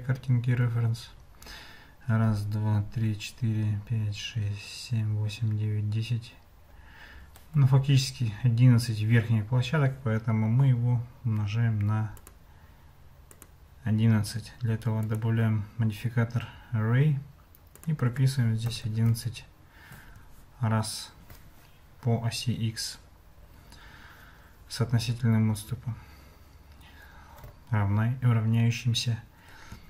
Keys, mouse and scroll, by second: 12.2 click, 13.3-15.2 drag, 17.9-20.3 drag, 18.8 KP_1.